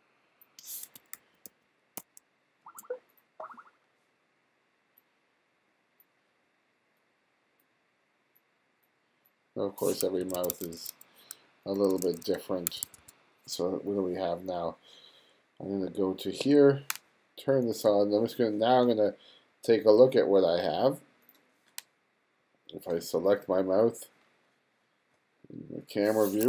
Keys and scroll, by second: 1.2 super+z, 10.3 1, 11.9 2, 12.7 1.